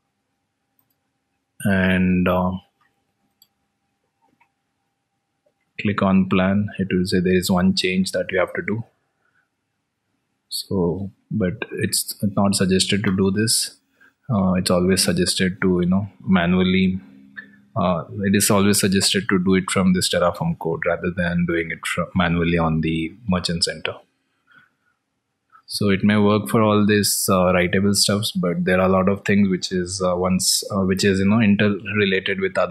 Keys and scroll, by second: 11.2 alt+Tab, 31.6 alt+Tab.